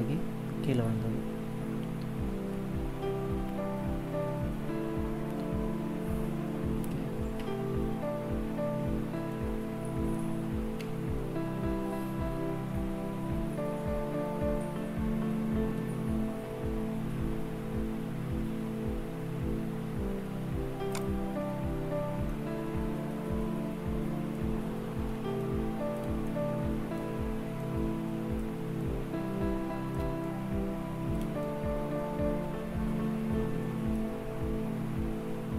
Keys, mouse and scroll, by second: 7.2 KP_0, 9.2 middle click, 10.7 KP_0, 13.5-14.8 scroll up 4, 15.0 scroll up 1, 15.6 n, 16.6-17.0 scroll down 3, 17.2-18.2 scroll up 5, 19.0-19.6 scroll up 6, 20.8 click, 21.3 n, 22.1 middle click, 25.2 shift+middle click, 26.1 middle click, 27.5 middle click, 28.7 middle click, 30.1 shift+middle click, 31.3 middle click.